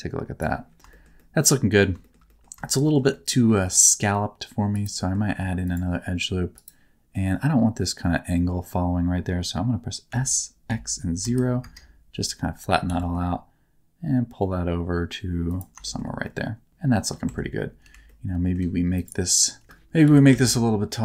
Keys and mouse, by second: 0.9 shift+middle click, 1.1 middle click, 2.0 shift+middle click, 2.2 middle click, 2.6 shift+middle click, 2.8 shift+middle click, 3.1 middle click, 3.5 ctrl+r, 4.9 middle click, 5.3 ctrl+r, 7.1 middle click, 10.0 s, 10.6 x, 11.2 KP_0, 11.5 KP_Enter, 12.8 g, 15.4 click, 15.8 shift+middle click, 16.2 middle click, 16.7 Tab, 17.2 Tab, 17.8 3, 18.0 middle click, 19.6 3, 20.0 g, 20.2 z.